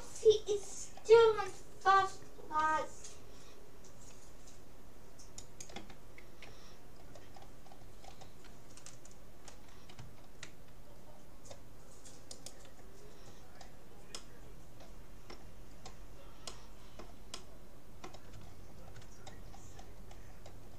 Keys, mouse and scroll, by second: 2.1-3.1 middle drag, 2.6 g, 7.1-9.9 middle drag, 10.0 a, 10.9-12.3 middle drag, 12.3-13.9 right drag, 14.1-15.9 middle drag, 16.1-16.5 scroll up 1, 16.5 middle click.